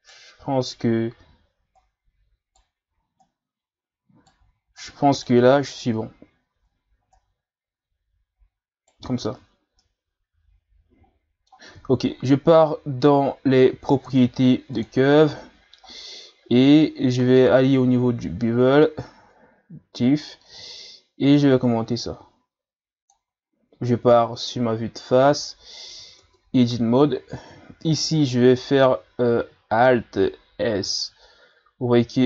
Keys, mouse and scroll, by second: 1.8 right click, 3.2 right click, 4.8 right click, 6.4-7.1 ctrl+scroll up 1, 7.1 right click, 9.2 Tab, 9.6 scroll down 2, 9.8-12.8 middle drag, 14.8 click, 15.3-16.9 scroll down 13, 20.6-23.6 drag, 24.1 KP_1, 25.0-26.2 shift+scroll up 4, 26.2 Tab, 30.7 alt+s.